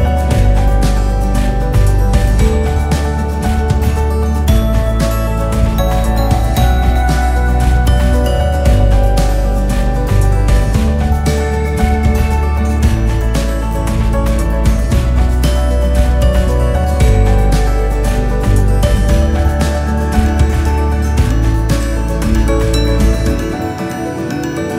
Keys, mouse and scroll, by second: 0.1 g, 2.7 click, 3.0-3.4 scroll up 2, 3.4-4.5 scroll down 1, 4.5-5.6 drag, 5.6 KP_8.